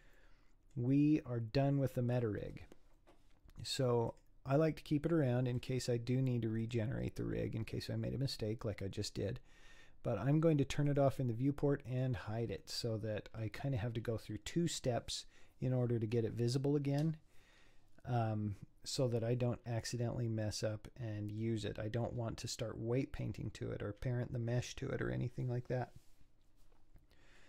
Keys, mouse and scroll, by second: 0.2-3.2 middle drag, 4.1-6.7 drag, 10.9 click, 11.9 click, 19.9-20.2 scroll down 4, 20.5-22.0 middle drag, 22.0 scroll up 6.